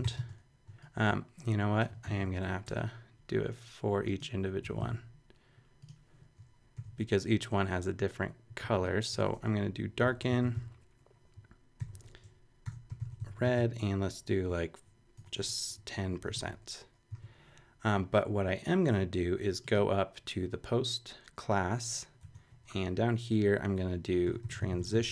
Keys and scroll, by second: 0.0-0.5 typing.